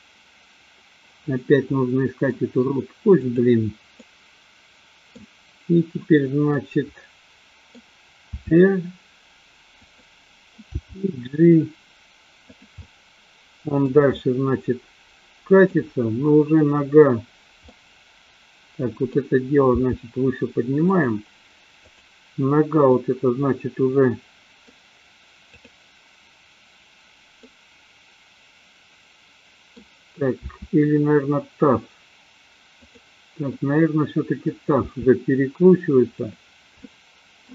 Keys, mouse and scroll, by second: 1.7 middle click, 3.1 click, 4.0-5.2 middle drag, 6.5-8.1 middle drag, 8.5 r, 10.8 g, 12.8-14.0 middle drag, 14.1-15.8 middle drag, 17.7-19.2 middle drag, 19.7 g, 21.0 click, 21.8-22.6 drag, 23.0-24.7 middle drag, 25.6 click, 27.5-29.8 middle drag, 30.5 r, 33.0 click, 33.6-34.6 middle drag, 35.0 r, 36.5 click, 36.7 middle click.